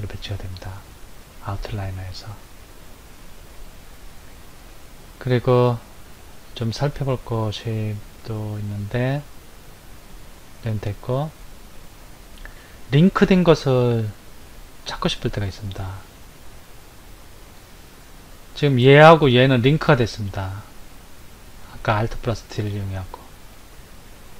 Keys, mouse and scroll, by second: 2.6 click, 4.0 Left, 6.3 Left, 17.5 click, 18.9 click, 19.5 click, 23.6 click.